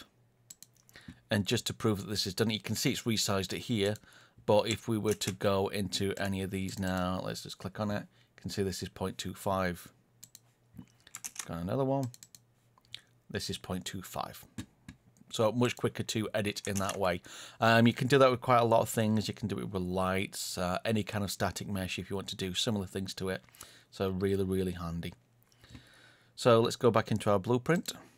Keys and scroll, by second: 5.0 ctrl+space, 11.2 ctrl+space, 16.7 ctrl+space.